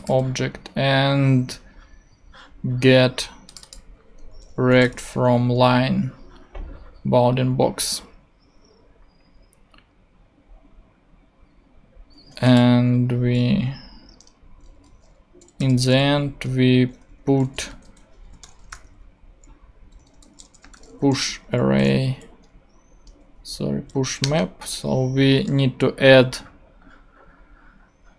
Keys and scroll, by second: 4.6 |, 4.9 n, 5.3 Return, 15.3-21.5 typing, 22.0 shift+Down, 22.6 Down, 23.7 Up, 24.2 Return.